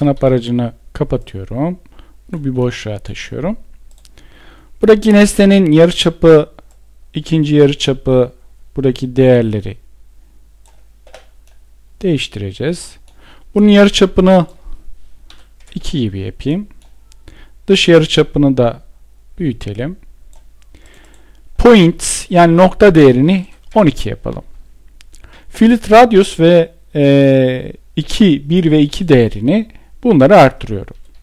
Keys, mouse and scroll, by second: 14.8 Return, 22.9 Return, 30.7 Return.